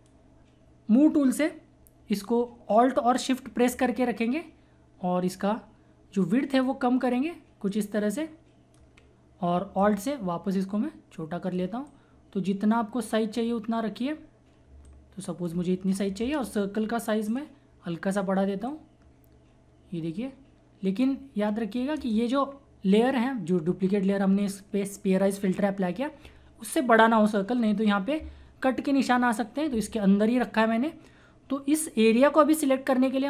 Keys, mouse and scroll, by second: 2.5 typing, 4.2 typing, 11.9-14.9 drag, 14.9-16.2 alt+drag, 15.5 typing, 16.2 Return, 17.3-21.6 drag, 21.1-21.6 typing, 21.9 Return, 23.6 Up, 25.9 typing.